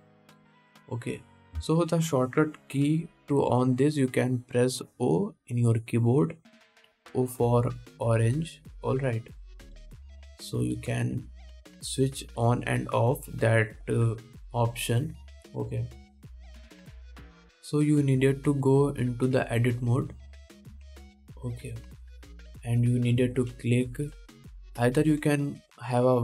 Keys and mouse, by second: 4.1 o, 11.0-13.4 typing, 18.4-25.1 middle drag, 22.0 Tab, 24.4 1, 25.1 alt+a.